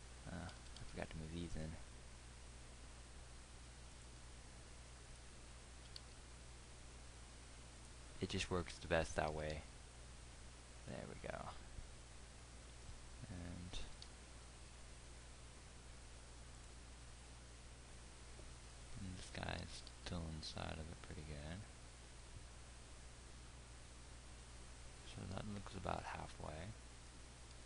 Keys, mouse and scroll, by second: 0.9 g, 6.5 g, 9.6-13.4 drag, 9.9 g, 14.5-18.1 drag, 14.5 g, 20.1-23.5 drag, 20.1 g.